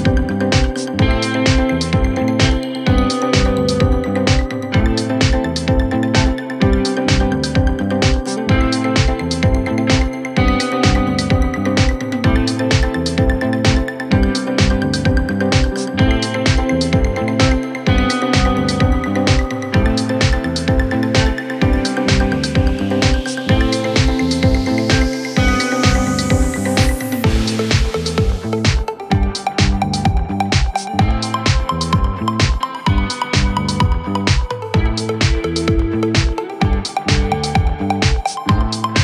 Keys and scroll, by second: 0.6-1.7 typing, 12.6-14.3 typing, 17.1-17.9 typing, 20.3-21.3 typing.